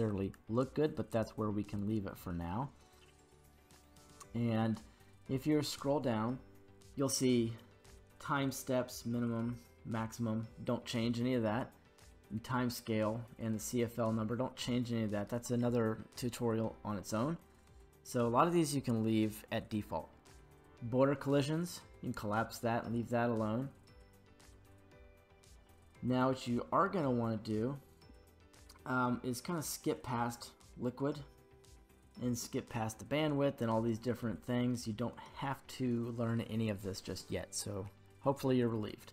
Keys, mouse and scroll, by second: 21.6 click, 21.6 scroll down 1, 23.9-24.6 scroll down 1, 24.6-29.7 scroll down 1.